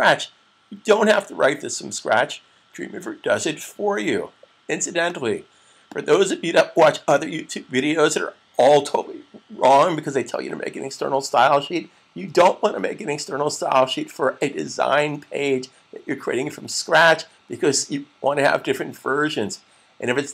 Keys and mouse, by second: 4.8 click.